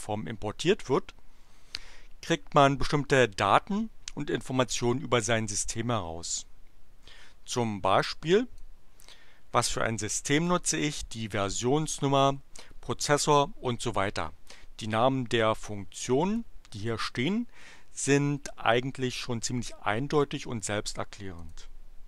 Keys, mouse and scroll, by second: 8.5 click, 10.4 click, 15.7 click, 21.3 click.